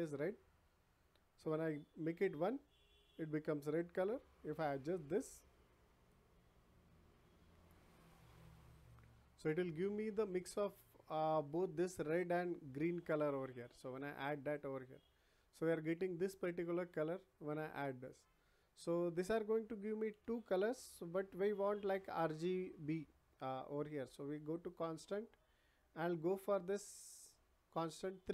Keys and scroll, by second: 20.1 Delete.